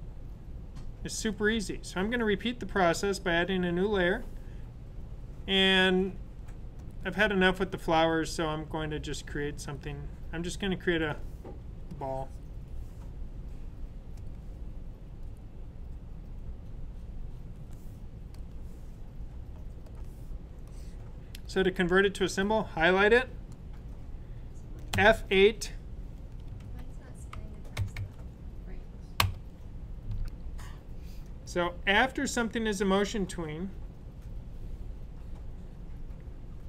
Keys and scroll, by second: 24.9 F8, 26.3-28.4 typing, 30.3 F5.